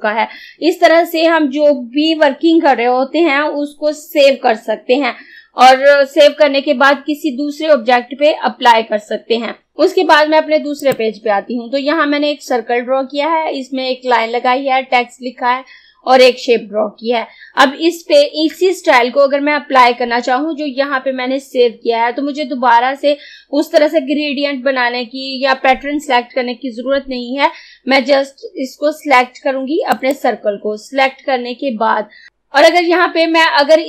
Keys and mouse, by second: 9.7 click, 30.0 click.